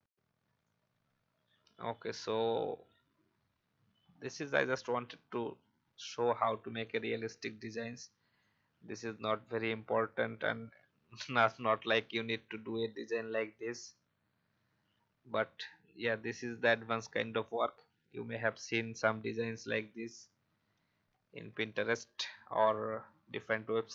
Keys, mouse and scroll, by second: 3.9-4.3 scroll up 1, 5.3-5.7 scroll up 1.